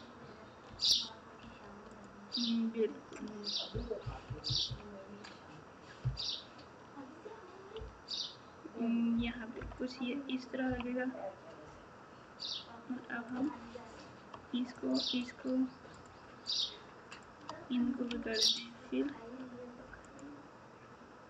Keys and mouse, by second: 0.8 alt+z, 1.9 click, 4.0 KP_2, 6.0 KP_1, 7.7 KP_9, 9.1 KP_8, 9.5 KP_8, 13.3 click, 15.3 shift+click, 16.0 shift+click, 16.4 shift+click, 18.1 f.